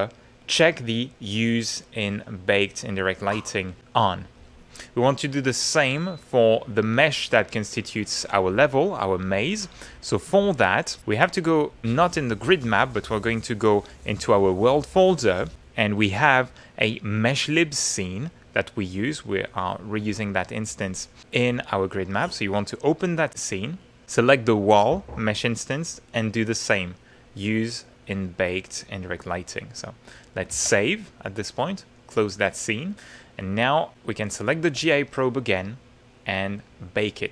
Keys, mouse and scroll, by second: 2.1 click, 5.1 middle click, 11.3 click, 14.5 click, 15.5 click, 16.8 click, 21.0 click, 21.6-22.6 middle drag, 23.3 click, 24.5 click, 26.9 click, 27.8 middle click, 30.5 ctrl+s, 32.0 middle click, 32.9 middle click, 33.9 middle click, 34.9 shift+middle click, 36.7 click.